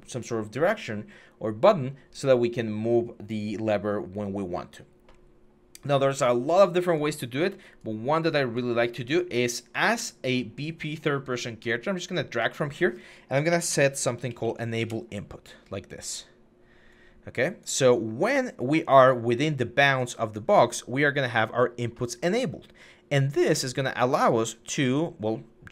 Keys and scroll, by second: 13.3-14.2 typing, 14.6 Return.